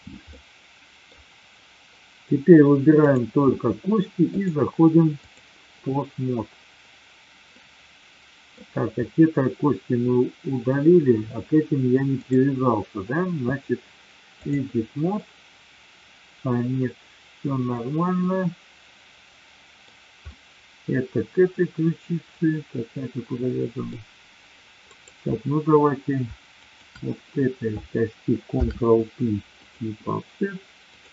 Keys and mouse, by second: 0.3-1.1 middle drag, 2.9 click, 4.2-5.4 drag, 7.5-8.5 middle drag, 12.1-14.7 drag, 15.1-19.8 middle drag, 20.3-23.9 middle drag, 24.9 click, 26.5 shift+click, 28.4 ctrl+p, 30.8 click.